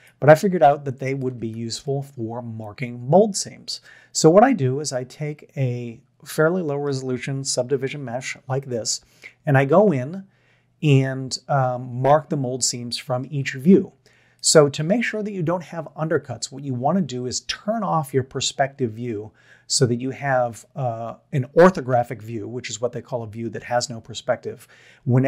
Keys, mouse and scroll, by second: 1.1 click, 1.4 Tab, 1.9 middle drag, 8.0 KP_3, 12.6-13.2 shift+middle drag.